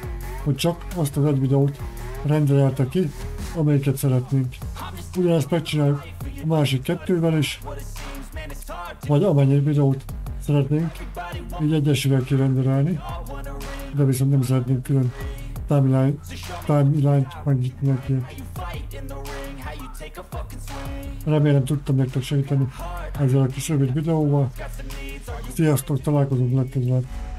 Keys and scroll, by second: 12.5 Caps_Lock, 22.3-23.0 typing.